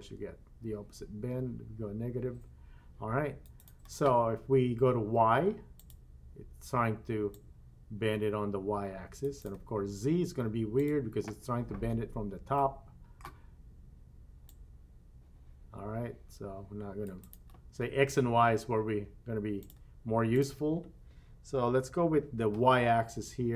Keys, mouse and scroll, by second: 5.8 click, 7.3-9.3 drag, 10.8 click, 12.5 middle click, 14.5-17.4 drag, 19.6 click, 20.3-23.5 drag.